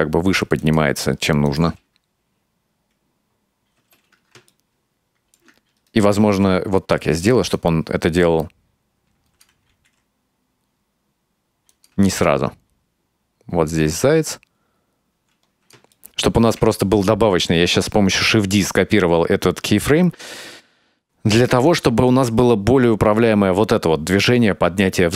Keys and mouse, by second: 1.5 click, 1.7 space, 3.8 space, 4.6 middle click, 6.3 shift+d, 7.6-9.5 drag, 9.9 g, 12.3-16.6 drag, 16.0 ctrl+middle click, 16.9 shift+middle click, 21.7-25.1 drag.